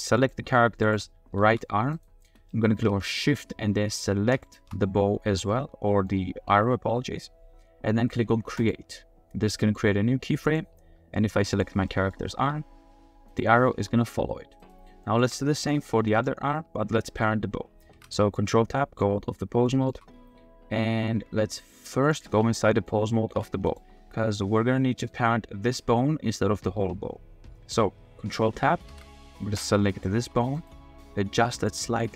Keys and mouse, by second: 0.2 click, 0.9 click, 1.4 r, 2.5-2.8 shift+middle drag, 3.0 middle click, 4.3 shift+middle click, 5.5-5.9 middle drag, 5.9 click, 8.6 click, 9.7 click, 10.4 click, 11.5 click, 11.9 drag, 12.4 r, 13.7 r, 15.0 click, 15.2 r, 15.8-16.2 drag, 17.9 ctrl+Tab, 18.3-19.0 middle drag, 19.6 shift+middle click, 19.7 shift+click, 19.8 shift+middle click, 22.7 click, 23.2 g, 23.6 click, 24.3 r, 28.9 ctrl+Tab, 30.2 g, 31.3-32.1 typing.